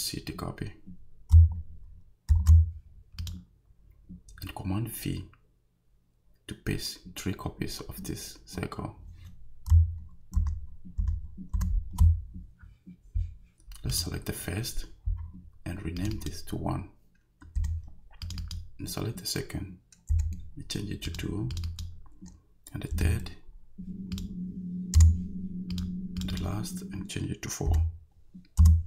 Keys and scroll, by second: 2.3 super+c, 10.4 super+v, 17.6 i, 20.1 2, 22.9 3, 25.0 BackSpace, 27.7 4, 28.6 Return.